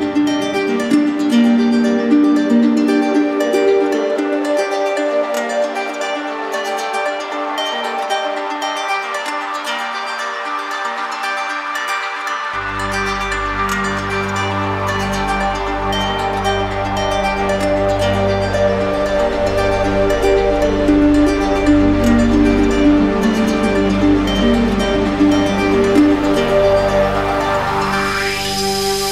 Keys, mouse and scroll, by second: 0.3 shift+click, 1.5 click, 3.0 click, 5.5 click, 13.8 alt+click, 17.4 click, 17.9 click, 18.3 shift+click, 19.3 shift+click, 20.8 click, 24.1 click, 26.4 click, 27.2 click, 27.6 shift+click, 28.1 shift+click, 28.6 click.